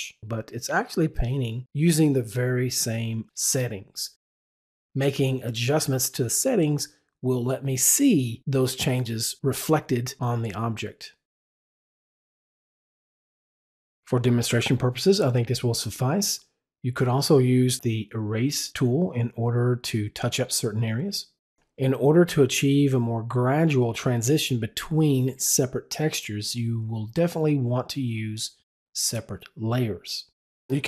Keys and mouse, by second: 0.6 click, 1.0 double click, 1.2 click, 1.5 click, 1.8 double click, 2.0 click, 2.5 click, 2.7 double click, 6.0 double click.